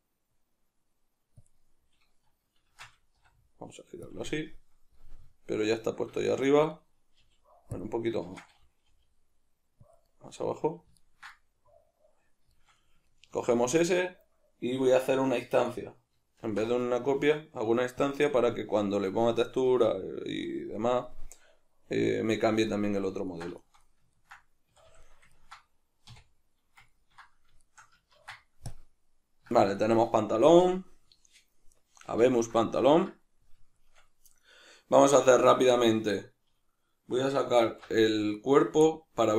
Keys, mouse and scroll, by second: 1.5 click, 2.7 shift+Tab, 3.2 r, 4.2 click, 4.3-7.8 middle drag, 7.2 g, 7.8 click, 8.2 shift+Tab, 8.9 g, 10.0 click, 10.1-18.2 middle drag, 16.4 alt+d, 18.2 click, 18.2-35.9 middle drag, 24.7 a, 26.1 \, 28.1 ctrl+s, 35.9 right click, 37.6 alt+h, 38.4 right click, 38.9-39.3 middle drag.